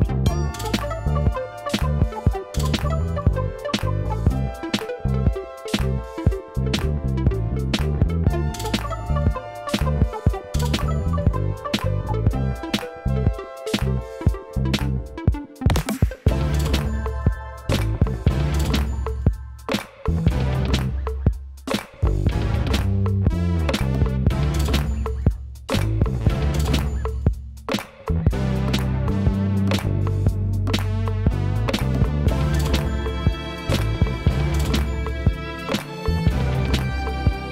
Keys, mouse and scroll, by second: 11.3 middle click, 11.5 KP_Divide, 12.4 scroll down 2, 13.1 scroll down 1.